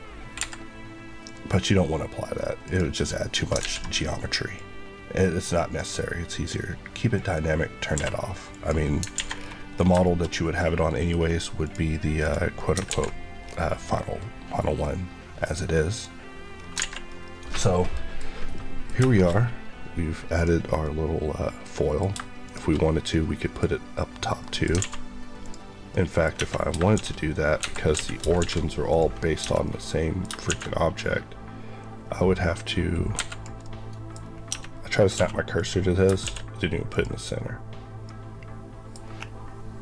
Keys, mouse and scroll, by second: 0.3 Escape, 1.1 click, 2.6 Left, 3.5 ctrl+z, 4.4 click, 7.8 q, 8.4 click, 9.1 alt+a, 9.2 scroll down 1, 9.8 shift+scroll down 1, 9.9 shift+middle click, 10.2 middle click, 10.5 scroll down 1, 10.9 middle click, 11.0 scroll up 1, 11.6 click, 12.1 click, 12.5 middle click, 12.8 alt+x, 13.3 scroll down 1, 15.3 click, 16.5 scroll up 1, 16.7 alt+a, 17.0 middle click, 18.1 scroll up 1, 18.4 middle click, 18.9 shift+middle click, 19.2 middle click, 20.3 click, 20.7 middle click, 22.0 shift+middle click, 22.3 shift+click, 23.0 middle click, 24.7 alt+a, 25.3 click, 25.8 middle click, 26.3 Tab, 26.8 shift+s, 27.5 Escape, 27.9 a, 28.3 shift+s, 28.8 click, 29.3 Tab, 29.6 middle click, 30.4 shift+a, 32.5 click, 33.0 click, 33.1 Escape, 33.5 middle click, 34.1 scroll up 1, 34.4 Tab, 35.0 scroll up 1, 35.1 1, 35.4 click, 36.0 shift+click, 36.1 shift+s, 36.8 click, 38.0 middle click, 38.9-39.8 scroll up 1.